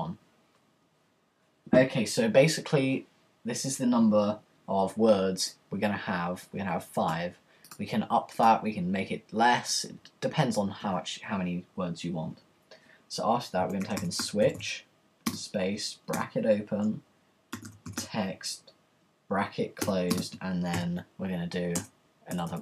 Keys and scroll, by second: 10.8 Return, 13.4-17.8 typing, 19.6-20.7 typing, 21.8 Return, 21.8 typing.